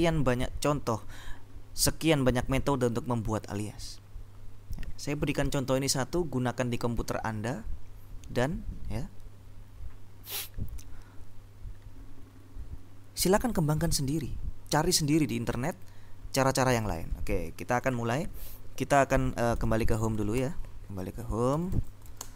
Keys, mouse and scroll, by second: 17.9 click, 19.7 c, 21.6 ctrl+l, 21.9 ctrl+p, 22.0 ctrl+w, 22.3 ctrl+d.